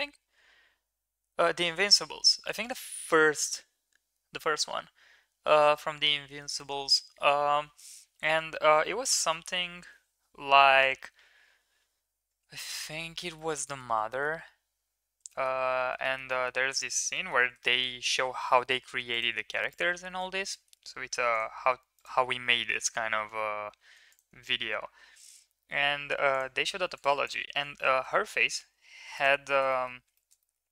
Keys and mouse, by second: 13.4 shift+middle click, 13.7 middle click, 16.1 middle click, 17.2 middle click, 17.6 shift+middle click, 18.5 middle click, 18.8 ctrl+r, 20.1 ctrl+z, 20.5 middle click, 20.9 ctrl+r, 23.0 ctrl+z, 25.1 g, 27.9 g, 29.6 middle drag, 30.1 shift+middle drag, 30.5 middle click.